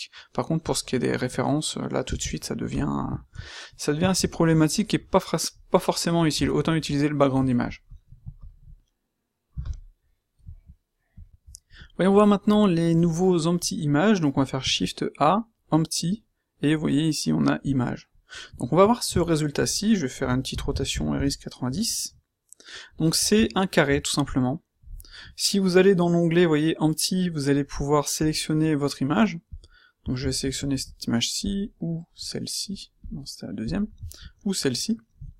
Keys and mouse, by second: 0.2-0.5 middle drag, 0.5-2.0 middle drag, 2.0 space, 9.4 x, 14.5 shift+a, 20.2 r, 21.8-23.3 middle drag, 34.3 middle click.